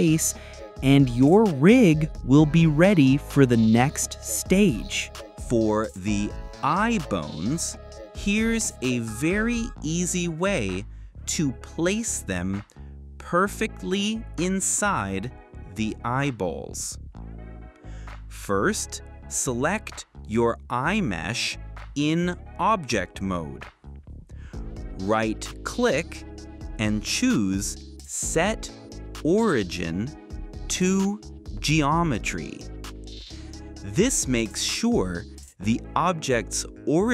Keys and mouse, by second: 0.0-2.8 typing, 0.0 click, 0.2 click, 0.4 click, 0.7 click, 1.4 click, 1.8 click, 2.6 click, 4.0 alt+h, 4.3 click, 5.1 shift+s, 9.6-37.1 drag.